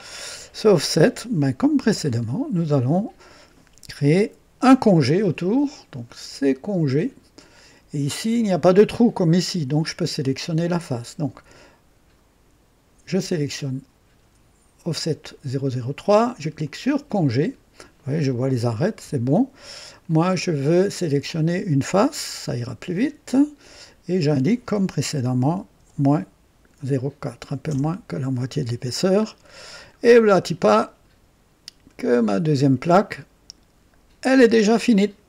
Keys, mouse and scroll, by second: 2.0-2.3 scroll up 1, 2.5-3.3 right drag, 16.6 click, 19.8 click, 21.2 click, 22.1 click, 23.6 click, 25.4 ,, 25.7 KP_4, 27.6 KP_Enter, 29.2-30.0 scroll down 2, 30.4-32.1 drag, 32.5 scroll up 1, 33.1-33.7 right drag, 34.3 click.